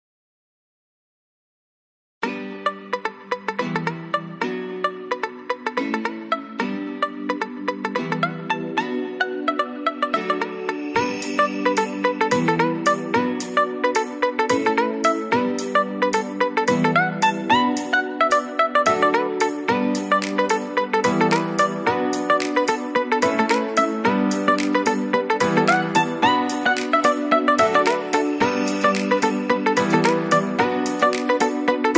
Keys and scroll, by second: 4.0 ctrl+s, 7.1 ctrl+-, 7.4 ctrl+0, 19.2 ctrl+z, 26.7 ctrl+z, 31.3 ctrl+z.